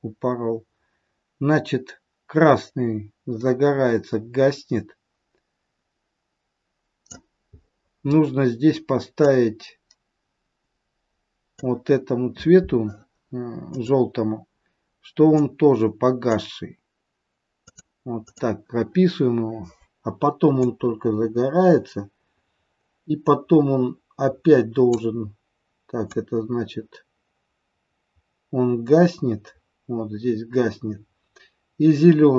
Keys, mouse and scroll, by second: 7.5-9.3 scroll up 8, 9.3 click, 9.3 scroll up 1, 13.6 click, 15.3 click, 17.5 click, 18.1 click, 20.6 click, 26.2 click.